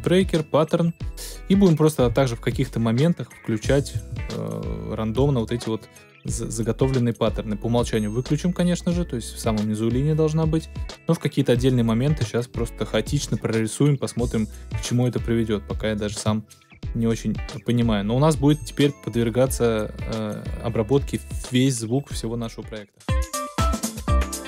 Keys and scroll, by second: 22.9 space.